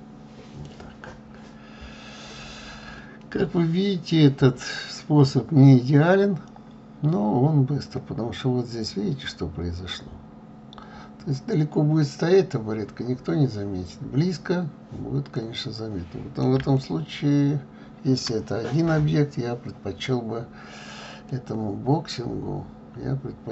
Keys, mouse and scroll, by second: 5.3-5.7 scroll up 2, 6.4 scroll up 2, 10.5-11.6 scroll down 11, 13.0-14.3 scroll up 11, 14.5 scroll down 2, 15.5-23.5 middle drag.